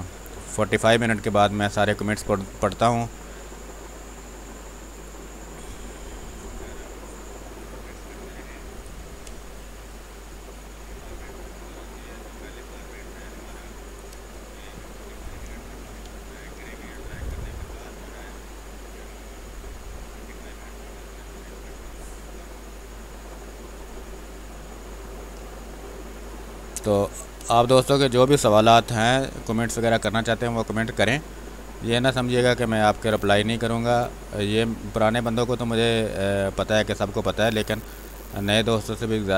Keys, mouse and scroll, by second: 0.0-0.3 typing, 1.2-6.1 drag, 6.1 space, 6.3 click, 7.8 r, 8.0 click, 8.9 b, 9.5 click, 9.7 space, 12.3 click, 13.3 space, 13.4 click, 13.7 space, 15.1 click, 15.8 ctrl+d, 16.7 click, 16.9 space, 17.4 alt+click, 21.3 click, 27.0 b, 27.4 space, 27.7 ctrl+click, 28.9 space, 29.1 click, 29.3 space, 30.1-32.9 drag, 32.9 space, 33.1 click, 33.5 space, 34.1-39.3 drag.